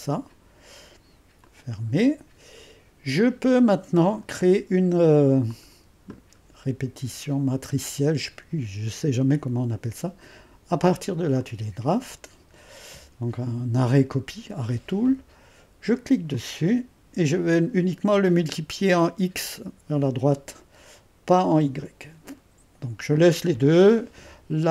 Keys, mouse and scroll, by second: 5.5-8.6 drag, 11.4-14.6 drag, 16.3-18.4 drag, 21.5-24.7 drag.